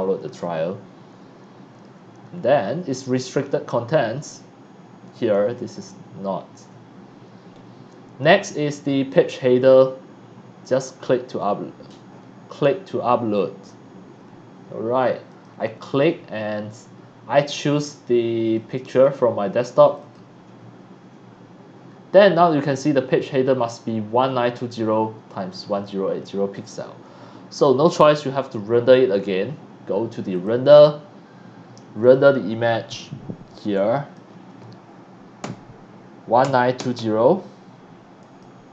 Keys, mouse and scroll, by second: 2.3-2.6 scroll down 1, 15.2 click, 17.9-18.5 drag, 18.9 click, 19.8 click, 27.8 click, 30.3 click, 32.0 click, 33.6 click, 35.4 KP_1, 36.4 KP_9, 36.8 KP_2, 36.9 KP_0, 38.2 click.